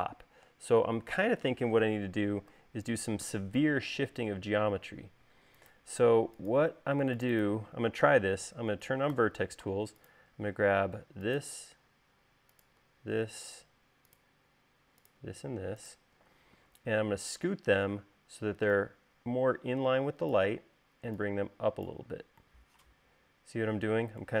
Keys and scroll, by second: 3.0 u, 9.6 v.